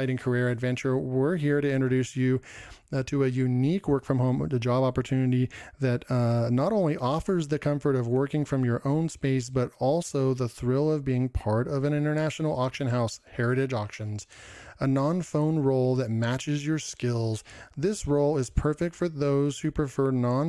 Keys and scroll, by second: 4.8 ctrl+m, 12.6 ctrl+m, 12.8 ctrl+m, 13.4 ctrl+m, 16.0 ctrl+m, 16.3 ctrl+m, 17.3 ctrl+m, 18.5 ctrl+m, 18.6 ctrl+m, 18.8 ctrl+m, 19.7 ctrl+m, 20.2 ctrl+m.